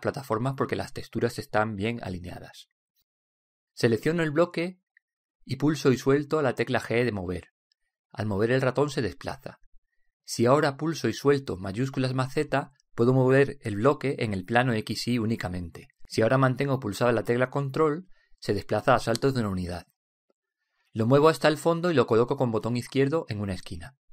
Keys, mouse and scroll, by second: 5.1-6.7 drag, 5.7 shift+g, 6.7 right click, 6.7 shift+g, 7.6 g.